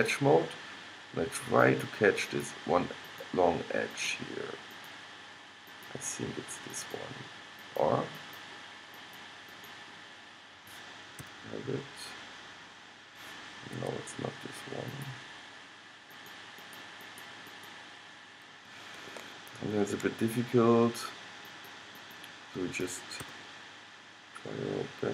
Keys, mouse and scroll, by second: 11.3 g, 15.0-19.6 drag, 19.6-21.7 middle drag, 21.7-23.4 drag, 23.3 g.